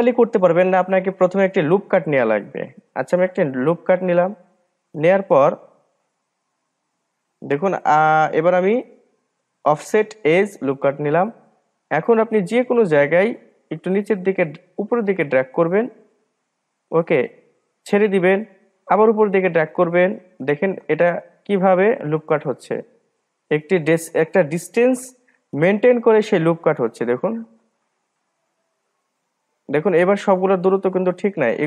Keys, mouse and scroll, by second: 4.3-5.5 drag, 5.5-6.7 middle drag, 6.7-8.9 scroll up 2, 8.9-11.9 drag, 14.1-17.1 drag, 19.2-21.2 drag, 21.2-24.2 middle drag, 25.3-26.7 middle drag, 26.7-29.8 drag.